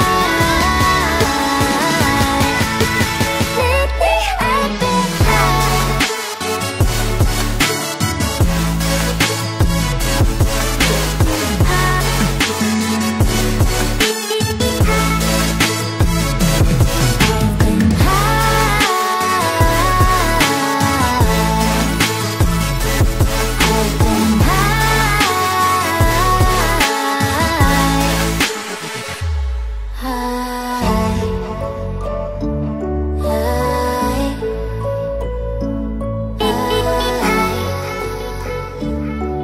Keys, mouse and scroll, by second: 0.3 alt+click, 1.4 alt+click, 5.7 alt+click, 8.5 Up, 8.7 Up, 9.5 alt+scroll down 1, 11.3 alt+scroll down 1, 11.4 alt+scroll up 1, 12.1 alt+scroll down 1, 12.2 alt+scroll up 1, 17.9 right click, 22.0 ctrl+click, 24.0 right click, 26.2 alt+scroll down 1, 26.3-26.9 alt+scroll up 2, 27.1 alt+scroll down 1, 28.1 alt+scroll up 1, 28.4-28.7 alt+scroll down 1, 29.8 alt+scroll up 1, 30.6 shift+click.